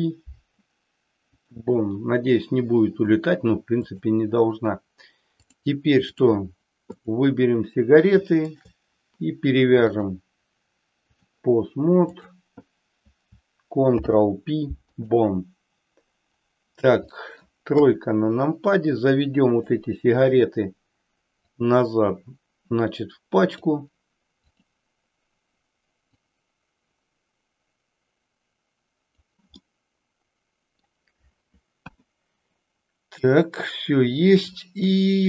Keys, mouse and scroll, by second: 5.5 click, 7.0 click, 8.4 shift+click, 9.9-11.3 drag, 12.2 click, 13.8 ctrl+p, 17.2 middle click, 17.9 KP_3, 19.4-20.2 drag, 21.6-23.7 drag, 24.6-25.0 drag, 26.0-29.3 drag, 29.7-31.0 middle drag, 31.8 KP_1, 34.9-35.2 middle drag.